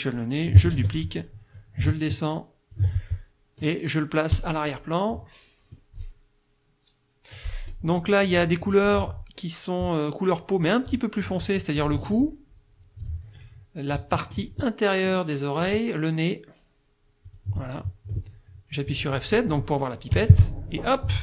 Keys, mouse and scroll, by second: 0.8 ctrl+d, 1.6-3.0 ctrl+drag, 4.4 click, 5.1 middle click, 8.0 middle click, 13.0 click, 14.4 shift+click, 15.6 shift+click, 17.3 shift+click, 17.8 shift+middle click, 20.2 F7, 20.8 click.